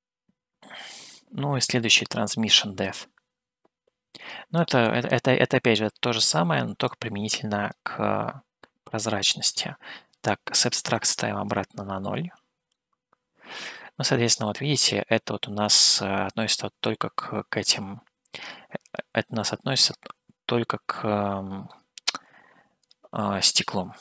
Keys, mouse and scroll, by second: 3.0-4.7 drag, 7.1 click, 9.0 middle click, 11.3-12.3 drag, 13.1-21.9 middle drag.